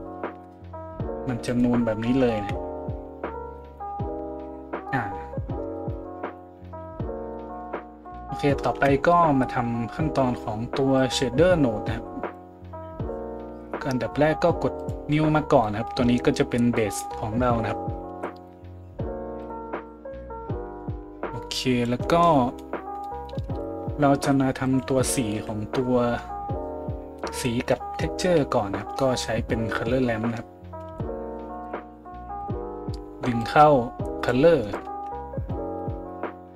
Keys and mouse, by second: 1.5 right click, 2.4 KP_Decimal, 4.1 a, 8.0 right click, 8.7 KP_Decimal, 19.5 middle click, 19.8-32.5 drag, 23.5 shift+a, 32.5-33.5 middle drag, 33.5-36.5 drag.